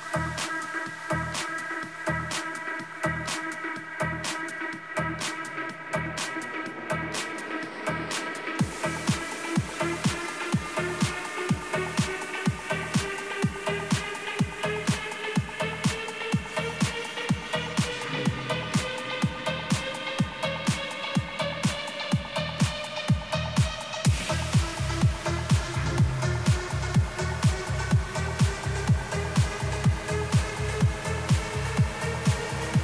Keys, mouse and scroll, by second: 0.2-2.9 middle drag, 2.9-5.8 middle drag, 9.0-11.3 middle drag, 11.3 Tab, 12.3 a, 12.8 a, 13.4-14.7 middle drag, 15.2-16.2 middle drag, 22.3-27.9 middle drag, 29.1-31.1 middle drag.